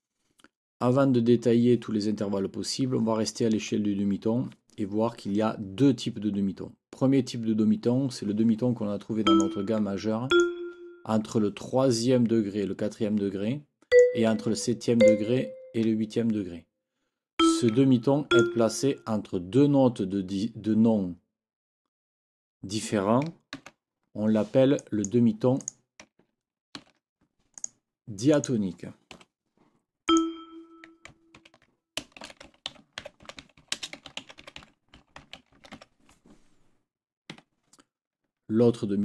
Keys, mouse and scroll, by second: 6.4-7.1 scroll up 4, 9.2 click, 10.3 shift+click, 13.9 click, 15.0 shift+click, 17.4 click, 18.3 shift+click, 23.6 ctrl+c, 24.8 click, 25.6 click, 26.8 ctrl+v, 27.6 click, 28.3 click, 29.2 Delete, 30.1 click, 31.4 ctrl+t, 32.0-36.3 typing, 37.3 Escape.